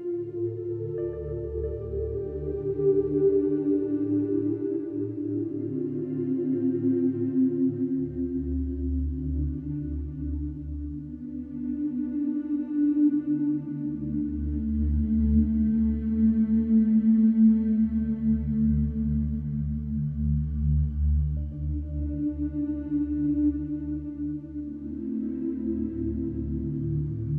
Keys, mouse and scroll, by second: 0.2 click, 2.6 click, 6.8 click, 8.3 e, 10.0 click, 13.1 click, 14.5 KP_9, 15.9 click, 17.9 middle click, 20.8 click, 23.0 click, 24.1 e, 26.0 click.